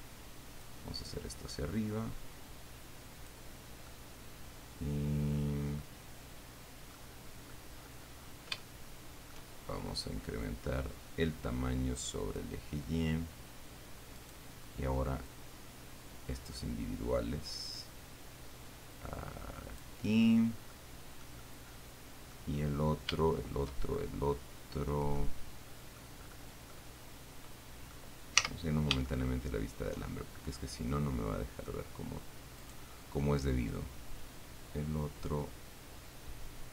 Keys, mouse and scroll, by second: 0.9-3.8 drag, 4.1-6.2 middle drag, 7.2 middle click, 8.0-8.8 scroll up 1, 9.1 shift+middle click, 11.0-12.8 drag, 14.4 right click, 15.5 middle click, 16.2-20.2 drag, 21.0-22.8 middle drag, 22.8-23.8 scroll down 3, 24.2-26.5 shift+middle drag, 26.5-27.0 scroll up 2, 27.0-28.4 middle drag, 28.6 z, 29.3-30.3 shift+middle drag, 30.5 shift+middle click, 31.1-32.1 drag, 32.9 middle click, 34.0 middle click, 34.2-36.7 drag.